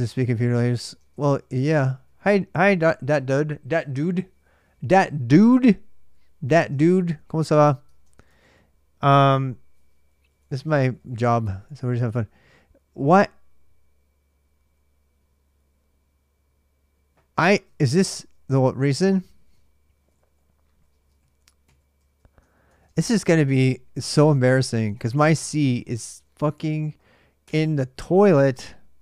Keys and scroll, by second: 0.6 ctrl+[, 0.7-2.1 typing, 6.2-12.3 typing, 17.6 Tab, 17.7-26.2 typing, 22.2 ctrl+[, 23.5 ctrl+a, 24.0 ctrl+[, 25.2 ctrl+a, 25.6 ctrl+[, 27.2 Return, 28.7-29.0 typing.